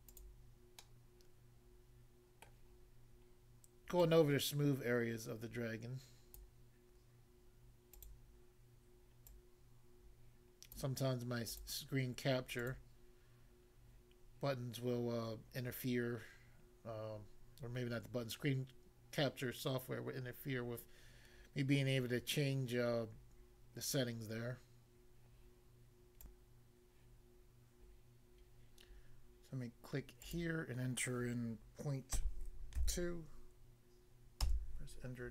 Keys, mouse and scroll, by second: 26.2 click, 30.3 click, 30.4 click, 32.2 ., 32.8 2, 34.4 Return.